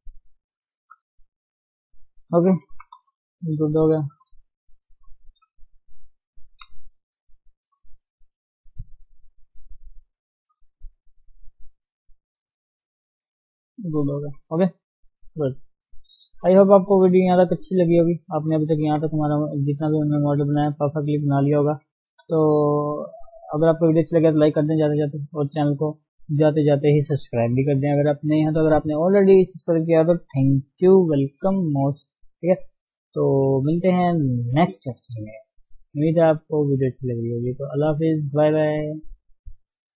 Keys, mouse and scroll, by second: 0.3-1.4 middle drag, 1.4 scroll up 1, 1.6-2.7 scroll down 3, 1.7 middle click, 2.7 KP_1, 3.0 KP_3, 3.4 scroll down 3, 3.6-4.2 scroll up 1, 4.2 scroll down 3, 4.7-5.7 scroll up 1, 5.7 ctrl+shift+s, 6.4 ctrl+shift+s, 10.5 ctrl+shift+s, 11.4 ctrl+shift+s, 13.6 ctrl+shift+s, 14.2 KP_1, 14.6-14.9 scroll down 3, 14.9 shift+middle click, 15.2 scroll up 1, 15.3 shift+scroll down 1, 15.4 shift+middle click, 15.9 scroll down 2, 16.2 shift+middle click, 16.5 scroll up 2, 16.9-20.7 middle drag, 20.8 middle click, 21.5-22.4 scroll up 4, 21.7 KP_1, 22.4-22.7 scroll down 4, 22.7 shift+middle click, 22.9-23.4 scroll up 1, 23.4-39.9 shift+middle drag.